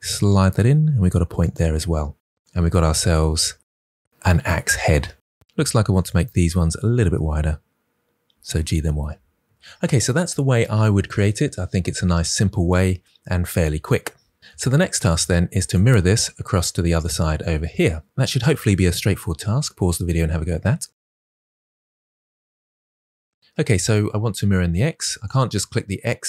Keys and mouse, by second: 1.3 click, 5.7 shift+click, 7.4 g, 7.6 y, 9.1 click, 12.9 Tab, 13.5 middle drag, 14.3 KP_1, 15.4 click, 25.1 click.